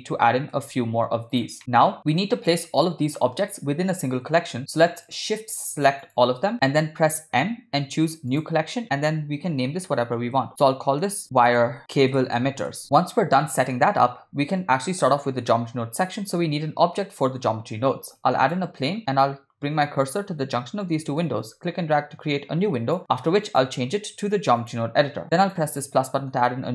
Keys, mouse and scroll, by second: 1.3 shift+d, 2.1 g, 2.9 middle click, 5.5 shift+click, 6.2-6.7 shift+drag, 7.7 m, 12.1 BackSpace, 14.0-14.6 middle drag, 17.2 shift+a, 21.7-23.0 drag, 23.5-25.8 drag, 26.0-26.6 middle drag.